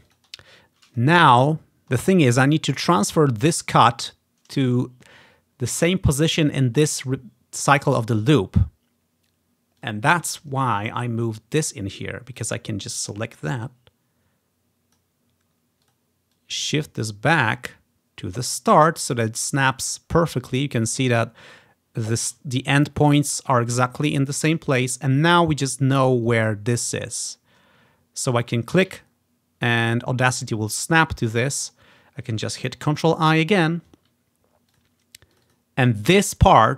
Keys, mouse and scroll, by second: 0.1 click, 1.3 scroll down 2, 9.9-11.7 drag, 12.4 click, 13.7-15.1 drag, 15.9 click, 16.4-19.1 drag, 19.5-21.0 ctrl+scroll up 4, 22.7-24.4 scroll down 3, 24.4-25.5 drag, 25.0-25.5 ctrl+scroll up 2, 26.4 click, 28.6-30.3 drag, 29.1-30.8 ctrl+scroll up 1, 30.8-32.2 scroll down 3, 32.9 ctrl+i, 33.5-33.9 ctrl+scroll down 1, 34.8 click, 35.6-36.7 drag.